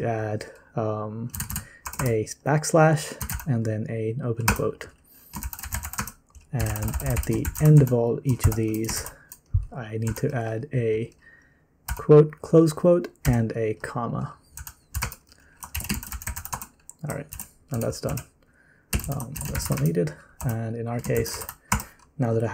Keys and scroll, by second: 0.0-3.3 typing, 4.4 Return, 5.1-10.7 typing, 11.9 typing, 13.2 typing, 14.3-22.5 typing, 17.3 ctrl+c.